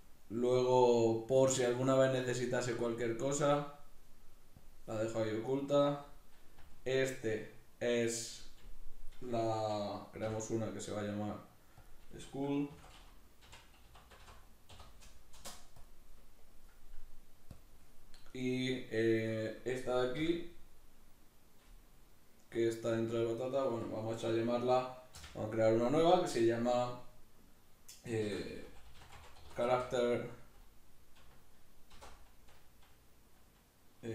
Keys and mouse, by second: 2.2-5.5 drag, 5.5 right click, 6.6 g, 8.2 right click, 10.2 m, 17.5 click, 18.3 right click, 20.1 m.